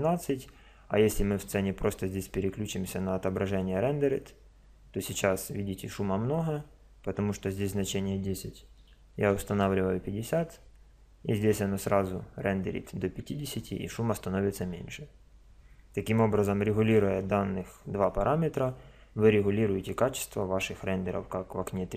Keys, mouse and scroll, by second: 7.6-9.4 drag.